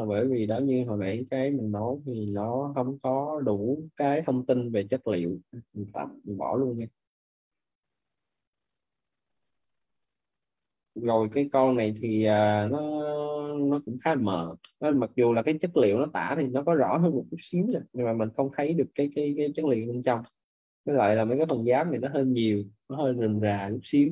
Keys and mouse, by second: 3.0 click, 5.8 Delete, 6.2 click, 6.6 Delete, 8.9 click, 12.0 middle click, 14.4 middle click, 16.6 middle click, 20.1 middle click.